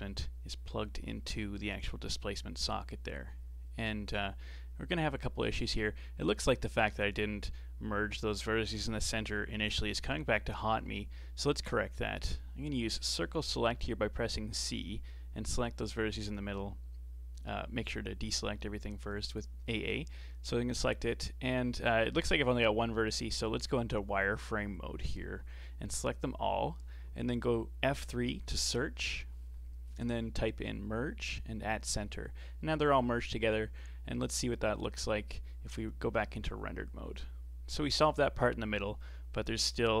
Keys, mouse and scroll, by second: 0.1 Tab, 2.0 ctrl+shift+click, 3.7 click, 5.2 middle click, 5.6 Tab, 5.8-6.2 scroll up 4, 6.2-10.5 middle drag, 10.5 Tab, 10.9 middle click, 11.6 scroll up 4, 12.0 shift+middle click, 12.5 scroll up 1, 14.0 c, 16.2 scroll down 4, 17.8 a, 18.1 a, 18.4 scroll up 4, 18.8 c, 21.5 g, 23.1 c, 24.4 z, 29.6 F3, 31.9-32.3 scroll down 2, 32.3-34.0 middle drag, 34.0-34.4 scroll down 1, 34.4 Tab, 34.8-35.1 scroll down 4, 35.1-35.9 middle drag, 35.9 z, 37.6-40.0 middle drag.